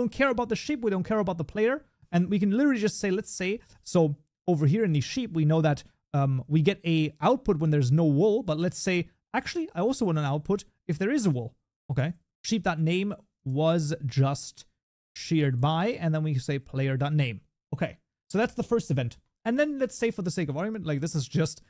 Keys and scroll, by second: 3.4 Tab, 12.3 Tab, 16.5 Tab.